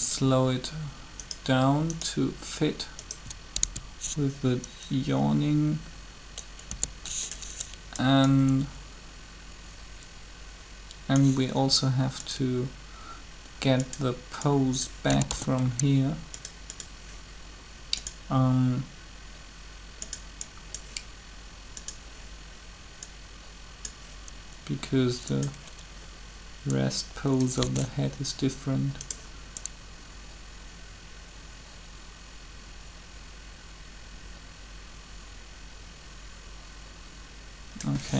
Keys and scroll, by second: 3.6 shift+s, 6.6 2, 15.0 typing, 27.6 alt+a.